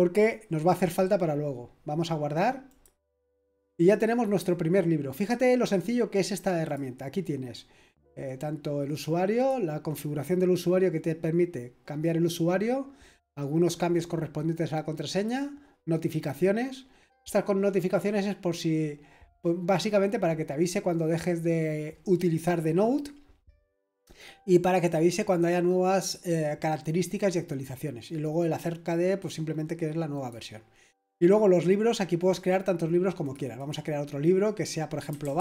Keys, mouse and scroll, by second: 1.4-2.7 scroll down 1, 2.7 click, 3.9-6.6 scroll up 1, 6.6 click, 9.3 click, 15.1 click, 27.4 click, 30.1 click, 30.9 click, 33.2-34.0 drag, 34.8-35.4 typing.